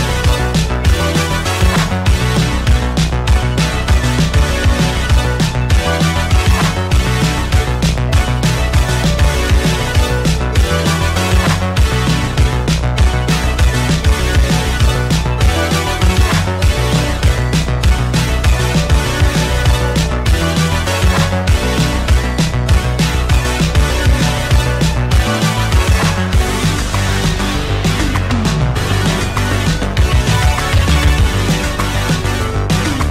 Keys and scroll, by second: 4.5 w, 5.3 w, 20.3 b, 24.5 b, 25.0 space, 27.1 ctrl+c, 27.4 space, 28.3 ctrl+v, 29.3 ctrl+d, 29.8 ctrl+h, 30.3 Left, 30.4-31.2 typing.